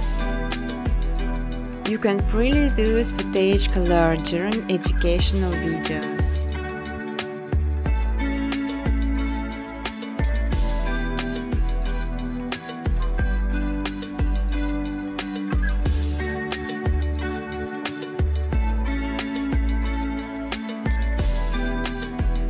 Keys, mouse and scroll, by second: 0.9 click, 1.6 click, 3.3 space, 4.4 space, 7.6 click, 8.1 click, 10.2 click, 10.8-11.7 typing, 12.8 click.